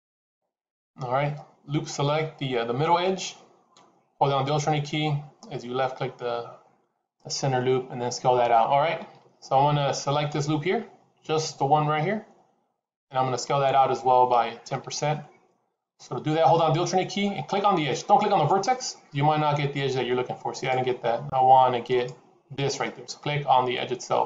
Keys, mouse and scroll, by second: 18.5 alt+click.